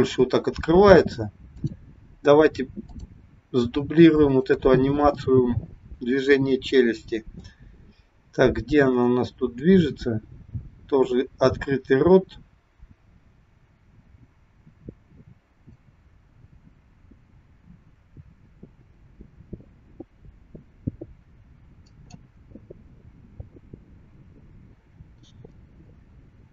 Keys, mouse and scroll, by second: 1.5 click, 2.8 click, 4.2 shift+click, 9.0 click, 9.9 click, 22.4-24.0 scroll down 10, 24.0-26.1 scroll up 8, 26.1 click.